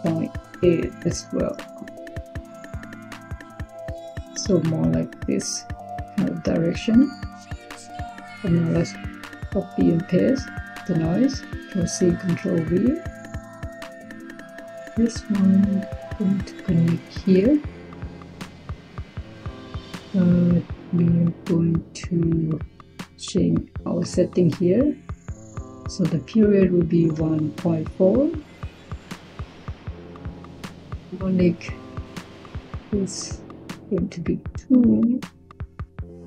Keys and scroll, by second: 0.0-0.4 typing, 9.5 ctrl+c, 12.0 ctrl+v, 26.8-27.9 typing, 33.6-34.3 typing.